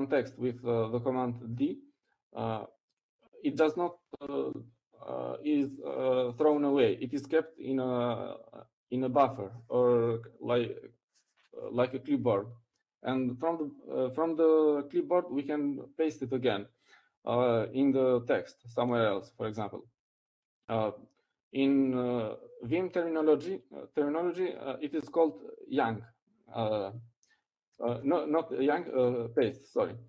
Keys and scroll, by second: 25.3 Down.